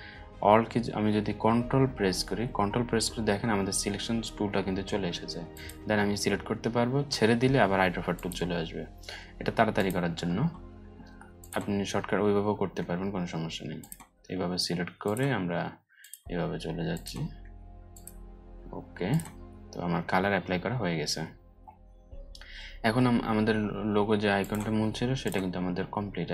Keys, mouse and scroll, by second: 5.1 ctrl+click, 9.3 ctrl+click, 13.3-15.0 ctrl+drag, 15.5 click, 17.5 ctrl+click, 20.0 scroll up 1, 21.3-22.6 alt+scroll down 4, 22.6-23.9 alt+scroll up 2, 23.9-26.0 alt+drag.